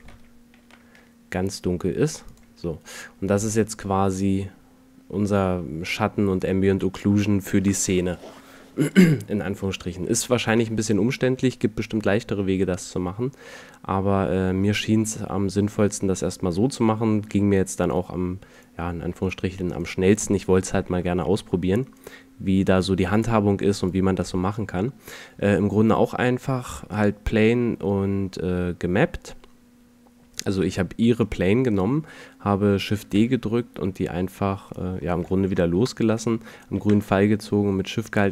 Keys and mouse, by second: 0.5 middle click, 3.7 middle click, 4.4 middle click, 5.3 middle click, 11.2-11.7 middle drag, 13.5 middle click, 17.3 a, 18.6 right click, 21.0 a, 23.1 a, 30.9 middle drag, 31.3-32.5 middle drag, 33.3 shift+d, 37.5 middle click.